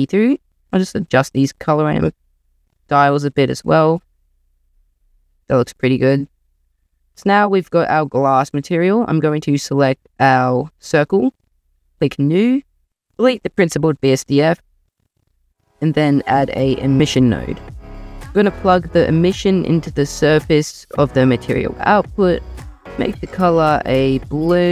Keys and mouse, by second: 0.7-1.4 drag, 3.2 click, 4.4-5.0 drag, 9.1 click, 11.8 click, 12.4 drag, 12.9 click, 14.2-15.2 typing, 17.5 click, 19.0 click, 22.4 click.